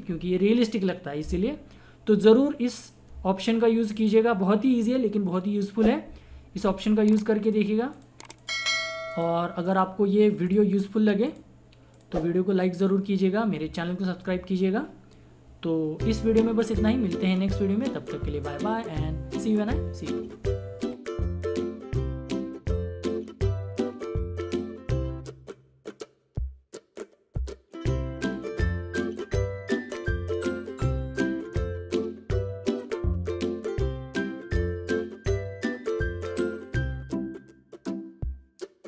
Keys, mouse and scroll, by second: 2.2 click, 7.4 click.